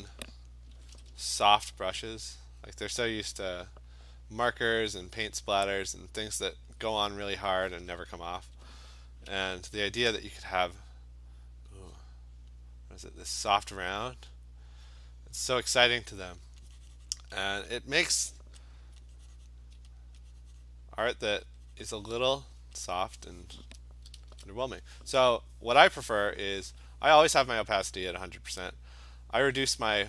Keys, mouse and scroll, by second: 0.8 ], 0.9 ], 1.1 ], 2.2 click, 2.7 click, 3.3 click, 4.7 click, 5.2 click, 5.6 click, 6.1 click, 6.5 click, 6.9 click, 7.3 click, 7.5-8.6 typing, 7.7 click, 9.9 alt+click, 12.5 click, 15.9 click, 17.1 click, 18.7 alt+click, 19.5 click, 20.0 alt+click, 20.7 click, 21.4 alt+click, 22.3 click, 22.9 alt+click, 24.2 !, 26.2 click, 29.9 click.